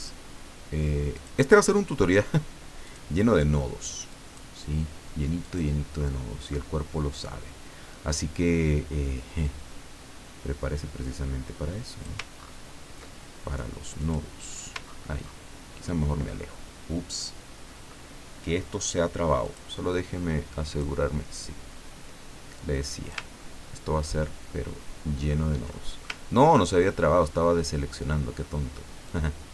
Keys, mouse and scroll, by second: 1.1 click, 2.8 click, 4.1 click, 5.4 click, 9.4-12.2 drag, 12.4-12.9 ctrl+scroll up 2, 14.0 click, 14.8-15.4 ctrl+scroll down 4, 19.4 click, 20.7 click, 22.6 click, 23.4 ctrl+scroll down 2, 24.5 ctrl+scroll down 2, 25.1-25.4 ctrl+scroll down 2, 25.7 ctrl+click, 26.3 ctrl+scroll down 2, 26.8 ctrl+click, 27.6-28.1 scroll up 2, 29.0-29.5 drag.